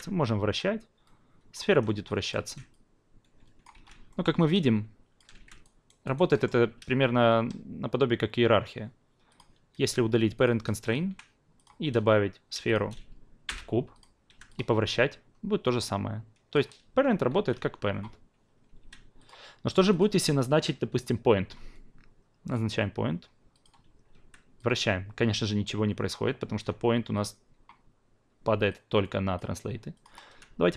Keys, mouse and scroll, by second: 0.5-1.5 drag, 1.6 ctrl+z, 2.1 drag, 2.4 ctrl+z, 2.7-3.7 drag, 3.8 z, 4.1 alt+middle drag, 4.3-5.6 alt+drag, 5.6 alt+right click, 6.3-9.3 alt+middle drag, 9.3 click, 9.8 f, 10.3 click, 10.8 click, 11.1 Delete, 11.5 click, 12.6 shift+click, 13.4 p, 13.9 click, 14.3 e, 14.5-16.5 drag, 16.8 ctrl+z, 17.3 ctrl+z, 17.5 ctrl+z, 18.8 q, 19.2 click, 20.0 shift+click, 27.1 click, 28.7-29.3 drag, 29.9 click, 30.3 w.